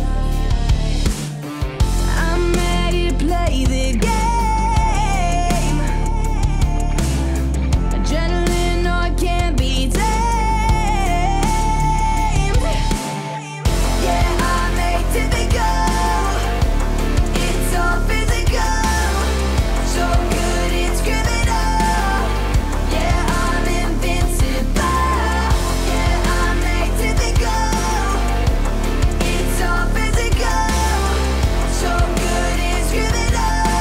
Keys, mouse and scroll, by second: 0.9-2.5 middle drag, 2.8 ctrl+z, 4.9 ctrl+z, 6.2-7.5 drag, 26.7 click, 30.7-31.9 scroll down 1, 31.9 click, 33.2-33.8 alt+drag.